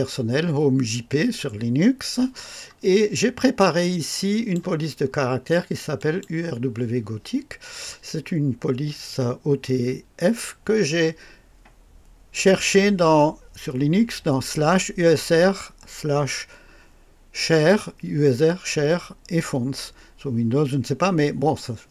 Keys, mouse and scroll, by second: 3.8-4.7 drag, 5.9 click.